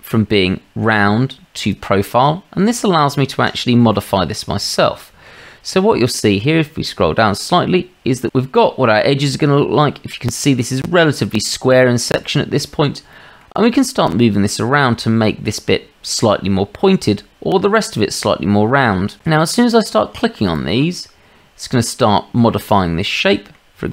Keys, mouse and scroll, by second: 1.6 click, 3.5 middle drag, 4.0-4.5 drag, 4.7-5.3 shift+middle drag, 9.6-12.0 drag, 12.2-12.6 shift+middle drag, 13.2 drag, 14.2-15.3 middle drag, 16.1-16.8 shift+middle drag, 16.8-17.5 drag, 20.5-21.7 drag, 22.8-23.5 drag.